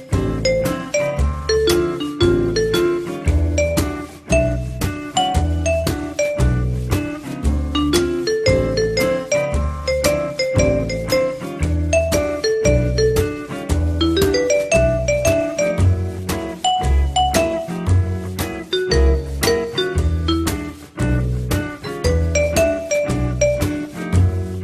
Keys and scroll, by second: 1.7 r, 10.8 l, 17.1 r, 21.5 w.